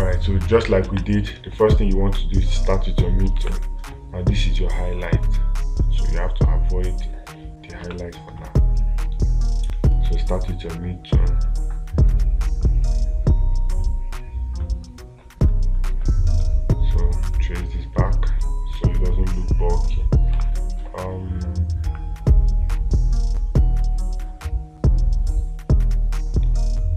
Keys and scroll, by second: 1.3 space, 3.8 space, 8.4 space, 20.8 space.